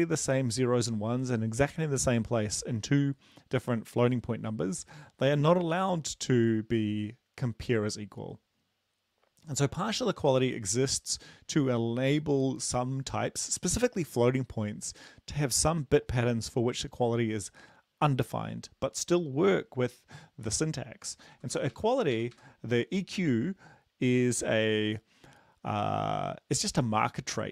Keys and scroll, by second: 21.3 Right, 21.5 Right, 21.7 Right, 22.4 shift+Right.